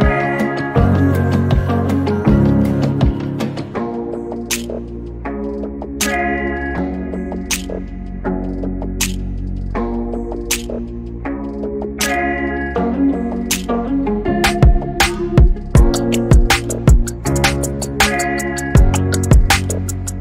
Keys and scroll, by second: 1.1 p, 2.5-5.5 typing, 16.9 r, 18.1-20.1 typing.